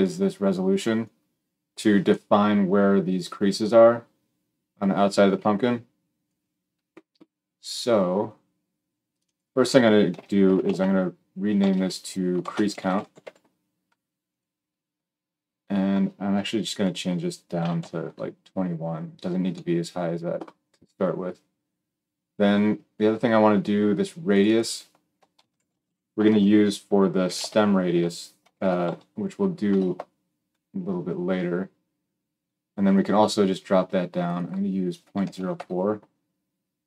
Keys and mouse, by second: 9.0-14.4 drag, 14.4-16.6 middle drag, 16.6-36.8 drag.